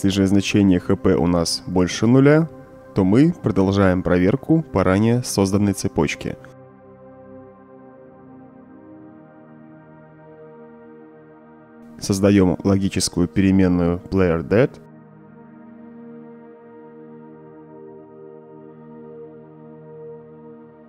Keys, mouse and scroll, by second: 2.2-3.3 drag, 3.5 click, 3.5-3.9 right drag, 4.3-4.7 right drag, 5.3-6.2 right drag, 6.5-7.4 right drag, 7.7-8.2 right drag, 9.1 click, 11.0-11.3 right drag, 12.2 middle click, 12.5-13.8 scroll down 4, 13.8 click, 17.0 Caps_Lock, 17.1-20.8 typing.